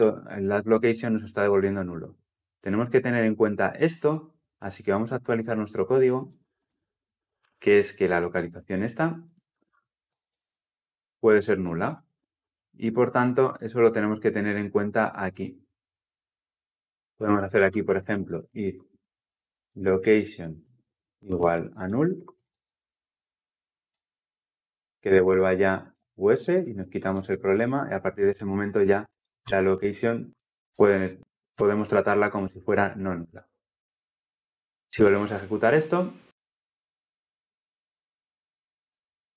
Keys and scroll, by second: 5.3 ctrl+F2, 20.2 Return, 25.7 Return, 32.3 ctrl+alt+l, 34.9 shift+F10.